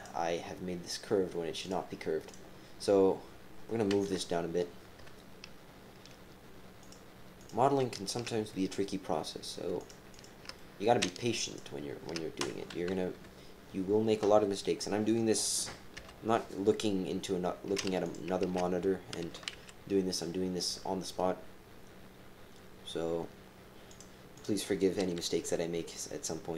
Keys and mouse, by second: 4.0 KP_3, 5.0 KP_3, 6.8 click, 7.4 click, 8.5-9.5 drag, 9.8 shift+click, 10.1 shift+click, 10.5 click, 11.4 shift+click, 12.4 KP_7, 12.9 KP_3, 13.0 KP_1, 15.9 g, 18.4 ctrl+z, 19.2 g, 24.3 click, 26.0 g.